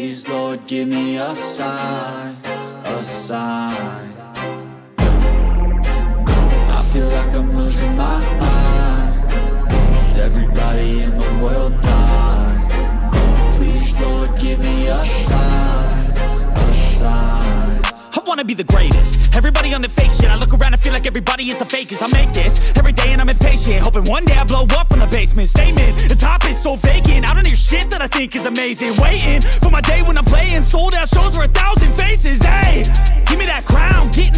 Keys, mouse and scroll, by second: 0.3 click, 0.9-6.9 typing, 1.1 shift+middle click, 1.1 click, 1.4 click, 1.9 click, 2.1 click, 2.6 alt+click, 3.1 click, 3.3 ctrl+x, 3.6 alt+click, 3.8 ctrl+x, 4.3 click, 4.7 click, 5.2 click, 5.4 click, 6.3 click, 6.4 scroll down 1, 6.5 shift+middle click, 6.6 scroll up 1, 6.6 click, 6.7 shift+middle click, 6.9 click, 7.1 scroll down 1, 7.3 ctrl+shift+click, 7.6 shift+middle click, 7.8 shift+click, 7.9 shift+middle click, 8.0 g, 8.6 shift+click, 8.8 shift+middle click, 9.0 click, 9.1 scroll down 1, 9.4 ctrl+shift+click, 9.5 shift+middle click, 9.8-12.7 typing, 10.7 shift+click, 11.1 Tab, 11.1 middle click, 11.4 click, 11.9 click, 12.3 ctrl+click, 12.4 middle click, 12.7 alt+click, 12.9 click, 13.1 ctrl+r, 13.3 right click, 13.6 ctrl+shift+click, 13.9 c, 14.0 middle click, 14.3 shift+click, 14.4 shift+middle click, 14.5 ctrl+shift+click, 14.9 ctrl+shift+click, 15.1 middle click, 15.3 shift+click, 15.4 ctrl+shift+click, 15.5 middle click, 15.6 shift+scroll up 1, 15.7 middle click, 16.2 scroll up 1, 16.4 click, 17.6-18.6 typing, 18.0 shift+middle click, 18.4 click, 18.7 middle click, 18.9 scroll up 1, 19.1 click, 19.3 middle click, 19.7 click, 19.8 Tab, 19.8 middle click, 19.9 click, 20.1 scroll down 1, 20.3 shift+middle click, 20.4-20.9 scroll up 2, 20.5 shift+middle click, 20.6-24.5 typing, 20.7 click, 20.9 ctrl+shift+click, 21.0 middle click, 21.5 ctrl+click, 21.9 ctrl+z, 22.1 ctrl+click, 22.4 ctrl+click, 23.1 ctrl+click, 23.5 click, 24.4 ctrl+click, 24.5 middle click, 25.0 click, 25.1 scroll down 1, 25.5 click, 25.6 middle click, 25.7 shift+click, 25.9-29.2 typing, 26.8 ctrl+click, 27.7 ctrl+click, 27.9 middle click, 28.0 scroll down 1, 28.1 middle click, 28.4 shift+click, 28.5 shift+click, 29.0 ctrl+click, 29.1 middle click, 29.6 click, 29.9 middle click, 29.9 click, 30.3 scroll up 1, 30.4 shift+middle click, 30.4 ctrl+z, 30.6 ctrl+r, 30.6 shift+middle click, 30.9 ctrl+click, 30.9 scroll up 1, 31.1 click, 31.2-34.1 typing, 31.3 click, 32.1 scroll down 1, 32.2 shift+middle click, 32.3 ctrl+z, 32.4 click, 32.9 click, 33.5 click.